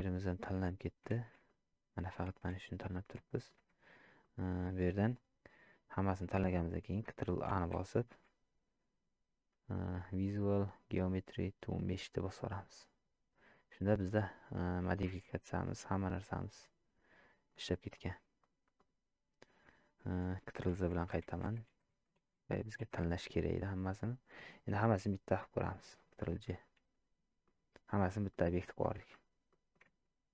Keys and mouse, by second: 1.2 shift+z, 1.5 click, 1.6-2.1 middle drag, 2.4 shift+z, 3.3 shift+drag, 4.2-4.6 middle drag, 15.0 shift+drag, 15.8 shift+click, 16.6 click, 18.8 click, 27.4-28.0 middle drag, 28.3-28.6 shift+middle drag, 28.9 Tab, 29.5 middle click.